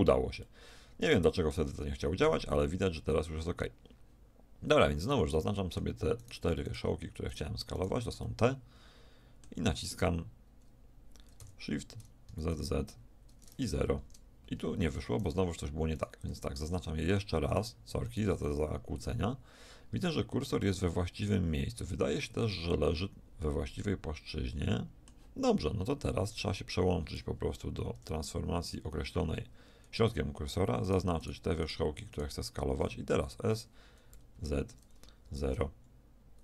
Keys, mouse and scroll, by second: 0.5-2.3 middle drag, 5.4-7.2 middle drag, 7.2 click, 7.3 middle click, 7.3 click, 7.5 middle click, 7.5 click, 7.7-10.1 middle drag, 11.5 s, 16.0-18.8 right drag, 16.9-20.5 middle drag, 23.3-24.7 middle drag, 27.9 ., 30.8-32.0 drag, 33.2 s.